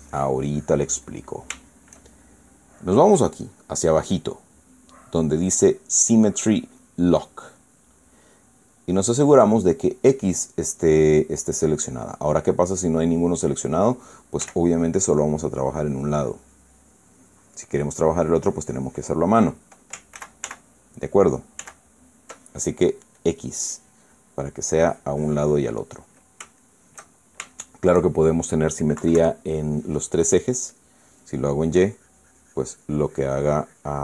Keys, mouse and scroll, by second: 1.9 middle click, 4.2-5.7 drag, 7.5 click, 8.7-9.9 drag, 13.6 click, 15.1 f, 15.7 click, 16.2-18.7 drag, 18.8-20.0 drag, 20.9 ctrl+z, 22.3 ctrl+z, 23.9 click, 24.9 middle click, 25.5 click, 26.5 middle click, 27.3-29.3 shift+drag, 29.7 KP_Subtract, 31.4 click, 32.5-34.0 drag.